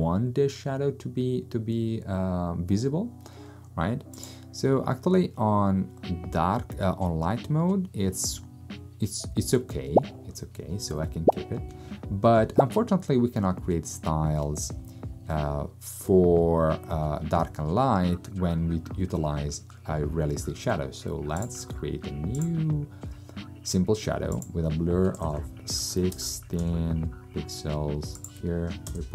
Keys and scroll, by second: 25.0-26.6 typing, 28.9 0.